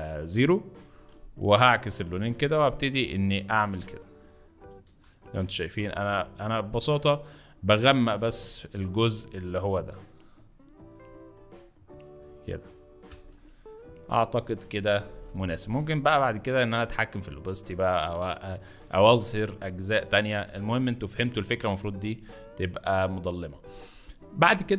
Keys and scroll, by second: 3.3 x, 4.8 ctrl+z, 6.5 ctrl+z, 8.2 ctrl+z, 8.7 ctrl+z, 19.1 z, 20.5 space, 21.9 z.